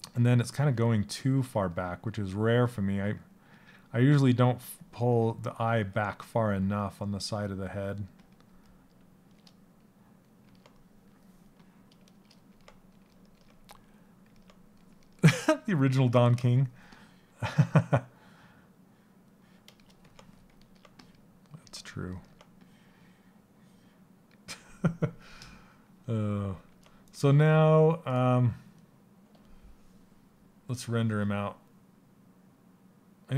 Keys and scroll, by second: 5.3 s.